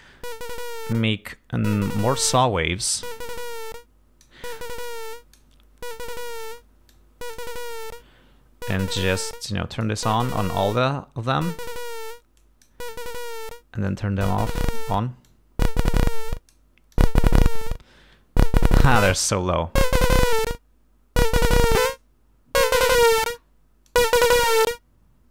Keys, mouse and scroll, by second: 2.5-4.5 drag, 4.9 click, 6.0 click, 7.0 click, 9.2 click, 10.5 click, 11.4 click, 12.5 click, 14.0-15.1 drag, 15.4 click, 16.1 click, 17.0 click, 18.9 click, 20.0-20.6 scroll down 4, 21.8 click, 22.8-23.3 scroll down 4, 24.0 click, 25.0-25.3 scroll down 2.